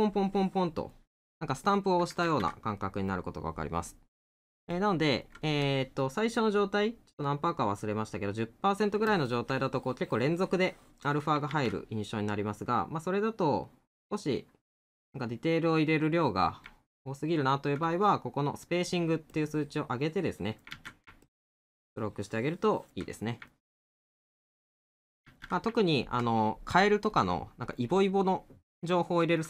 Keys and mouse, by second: 1.4 middle click, 2.8 middle click, 4.7 middle click, 16.9 middle click, 23.5 middle click, 25.8 middle click.